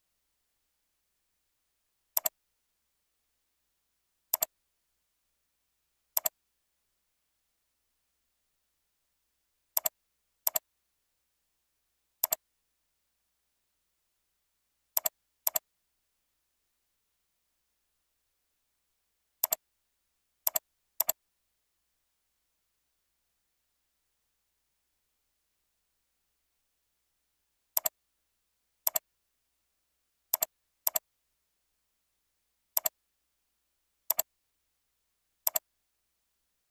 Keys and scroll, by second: 7.2 ctrl+Up, 35.1 ctrl+c, 35.9 ctrl+v.